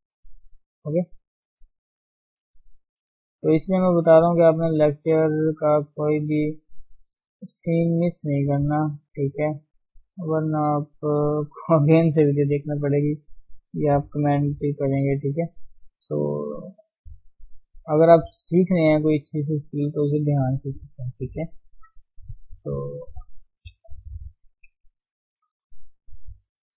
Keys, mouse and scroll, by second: 0.2-1.5 middle drag, 1.5 click, 1.8 g, 2.4 click, 2.6 g, 3.1 middle click, 4.1 g, 4.7 click, 5.1 g, 6.4-8.1 middle drag, 8.1 g, 9.4-10.7 middle drag, 10.7 click, 11.2 click, 11.4-12.9 middle drag, 12.9-13.2 scroll up 1, 13.2 middle click, 13.9 click, 14.4 g, 15.5 click, 15.7 g, 17.0-18.0 middle drag, 18.0 click, 18.3 g, 19.1-19.4 scroll down 2, 19.4 middle click, 19.9 Tab, 20.2-22.3 middle drag, 22.3 Tab, 22.5-24.3 middle drag, 24.3 KP_3, 25.2 scroll up 1, 25.5 Tab, 26.3-26.6 scroll down 3, 26.6-26.7 shift+scroll up 2.